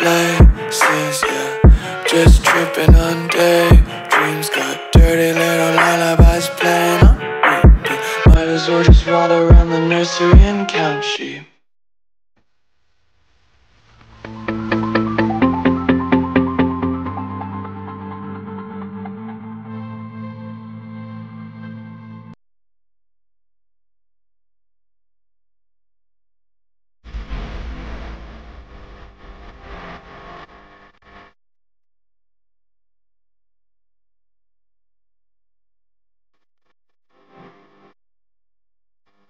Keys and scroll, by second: 0.0 v, 0.5 space, 1.0 alt+super+space, 1.1 alt+super+space, 2.3 Delete, 2.8 Delete, 3.3 space, 4.5-6.1 typing, 9.3 space, 9.8 super+space, 9.9 super+space, 10.2 super+space, 10.4 super+space, 11.8 a, 19.6 v, 21.0 a, 30.3 v, 31.4 space, 32.1 a, 37.7 space, 38.2 space, 38.3 space.